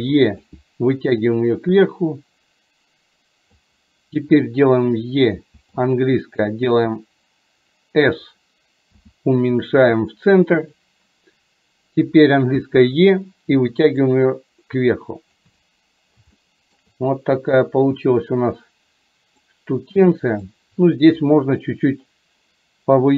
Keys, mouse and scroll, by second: 1.3-3.7 drag, 14.2-15.4 drag, 16.4 shift+middle click, 19.5-20.5 drag.